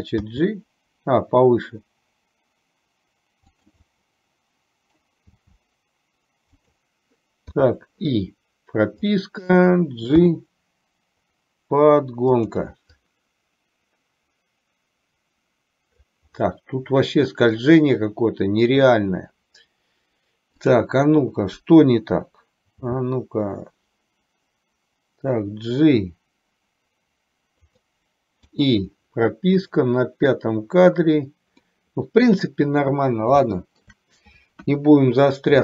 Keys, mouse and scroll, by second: 0.4 g, 4.0-5.0 middle drag, 5.4 g, 7.8 i, 9.0 click, 10.2 g, 13.2-16.3 drag, 16.4-17.5 middle drag, 20.7 click, 23.0 g, 28.7 i, 29.8 click, 31.8 middle click, 33.5 shift+middle click, 34.8 KP_1.